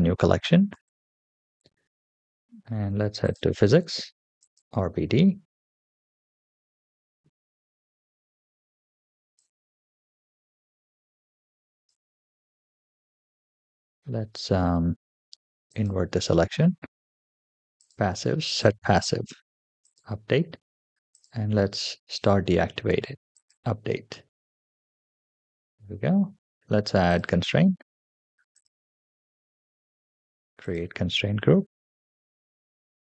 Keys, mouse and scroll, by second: 0.3 middle click, 3.1 click, 4.3 click, 4.7-7.3 scroll down 6, 7.4 KP_7, 9.2 click, 9.3-11.8 drag, 14.3-14.8 scroll up 3, 15.5 click, 16.4-17.5 scroll down 3, 17.7 click, 18.3 click, 18.9-19.7 scroll down 3, 19.7 click, 21.0 click, 22.0 click, 22.4-23.1 scroll down 2, 23.2 click, 23.9-24.6 middle drag, 25.0-25.5 shift+middle drag, 25.9-26.3 scroll up 2, 26.9 click, 28.4 click, 28.7-29.1 scroll down 2, 30.4 click.